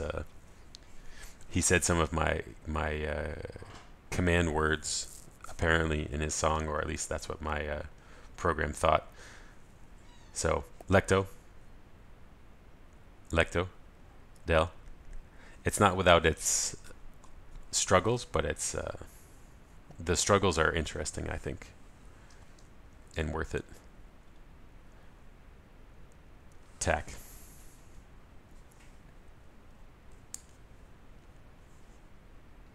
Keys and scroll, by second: 14.0 ctrl+alt+shift+super+a.